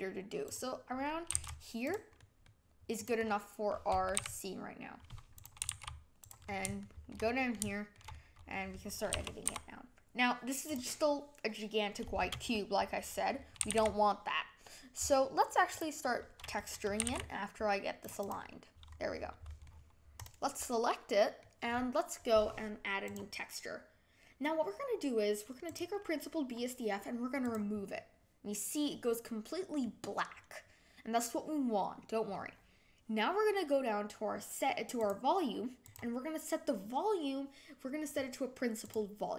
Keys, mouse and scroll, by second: 1.3 s, 2.1-3.0 middle drag, 3.0 click, 3.2-4.2 middle drag, 4.2 g, 5.6 g, 6.4-6.8 scroll up 5, 6.8-7.9 shift+middle drag, 7.9 scroll up 1, 8.1-9.1 middle drag, 9.1 s, 13.6 g, 17.0 g, 18.2 click, 18.9 scroll up 1, 19.6-20.2 middle drag, 20.2 click, 20.7-23.2 middle drag, 23.2-29.8 drag, 29.8-38.9 middle drag, 38.9 click.